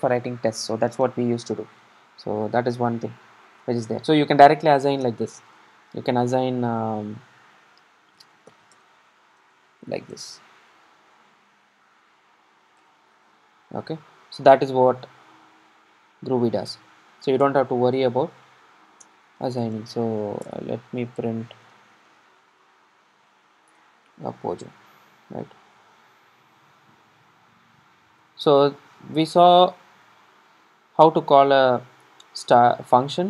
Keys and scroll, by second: 20.6 Return, 25.8 super+r.